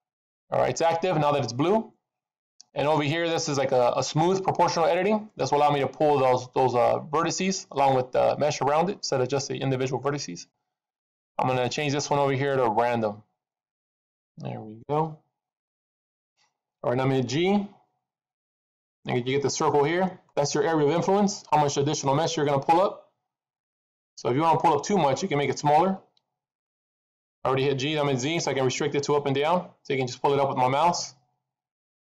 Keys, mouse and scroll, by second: 0.2 click, 11.3 click, 17.9 g.